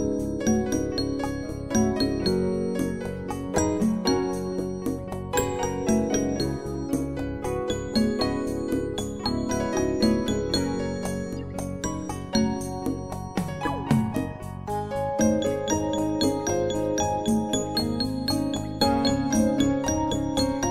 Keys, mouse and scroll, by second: 3.7 click, 3.7 typing, 5.1 typing, 6.2 2, 6.6 Return, 9.3 click, 11.8 click, 13.5 click, 14.7 right click, 15.4 click, 19.3 5, 19.6 Return.